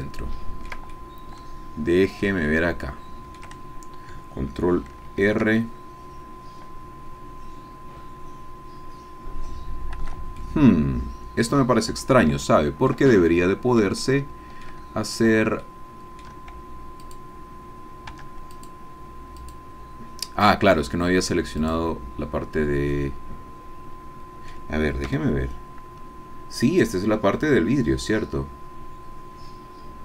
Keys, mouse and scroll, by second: 0.9-2.4 ctrl+drag, 2.5-3.6 shift+drag, 4.1 ctrl+click, 5.2 ctrl+r, 10.0 Escape, 10.4 click, 10.5 scroll down 1, 11.9-12.3 scroll down 1, 12.5 shift+click, 13.1 shift+click, 14.0 shift+click, 15.6 shift+click, 17.0 click, 18.1 Tab, 18.6 click, 19.4 click, 20.9-21.6 scroll down 2, 21.6 click, 22.9 middle click, 23.3-24.7 drag, 25.1 g.